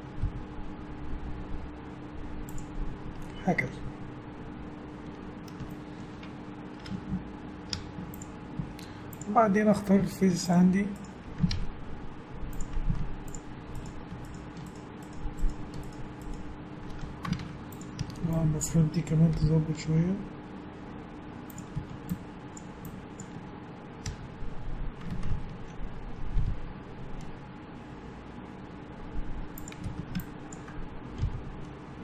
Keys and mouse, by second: 0.2 g, 3.4 middle click, 3.6 middle click, 5.3 middle click, 5.4 middle click, 6.9 Tab, 7.7 Tab, 8.6 z, 10.0 z, 11.5 ctrl+Tab, 12.9 z, 17.4 ctrl+Tab, 18.0 a, 18.5-20.2 drag, 19.4 g, 21.1 click, 21.7 a, 22.1-25.2 drag, 24.1 f, 25.3 ctrl+z, 26.4 g, 29.9 a, 30.2-31.8 drag, 31.2 g.